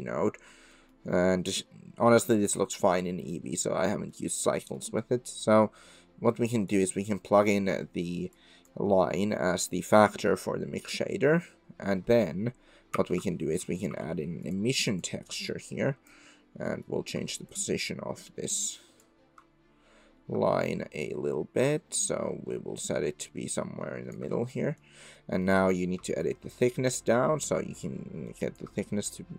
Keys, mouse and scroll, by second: 0.8 click, 2.1 middle click, 2.1 drag, 2.3-2.6 middle drag, 2.6 click, 2.6 middle click, 2.7 drag, 2.9 middle click, 2.9-3.2 drag, 3.2-4.4 middle drag, 4.7 click, 8.3 click, 9.3 click, 12.9 shift+a, 15.5 click, 16.7 click, 17.5-19.9 shift+drag, 21.0-24.2 shift+drag, 24.5 click, 25.2 click, 26.2-28.6 shift+drag, 29.0 middle click.